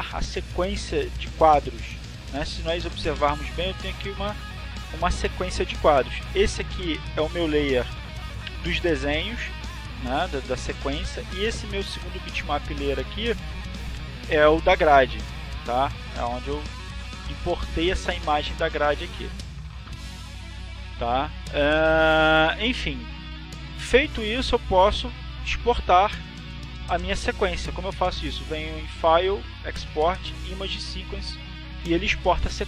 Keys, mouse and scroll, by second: 0.1 alt+click, 9.3 click, 10.4-11.8 drag, 12.9-14.1 drag, 18.7-20.1 drag, 20.6 click, 22.8-24.8 drag, 29.9 click, 31.3 click.